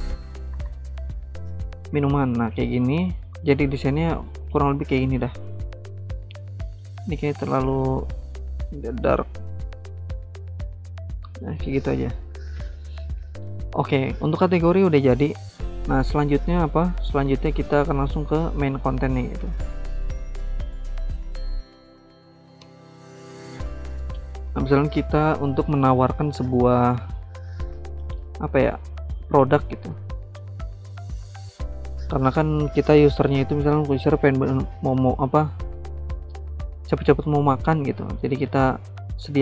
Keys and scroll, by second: 0.0-1.3 typing, 17.3 ctrl+c, 17.5 ctrl+v, 19.4-23.6 typing.